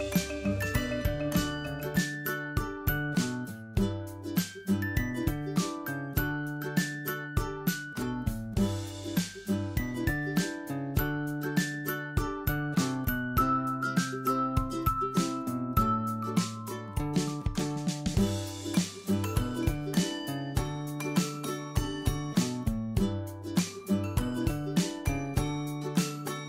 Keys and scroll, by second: 10.4 ctrl+j.